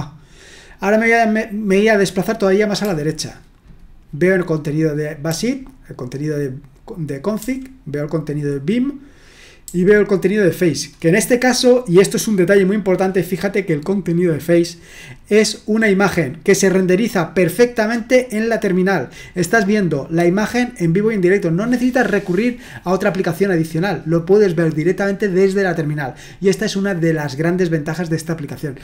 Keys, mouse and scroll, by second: 2.8 l, 5.3 j, 7.4 j, 9.6 j.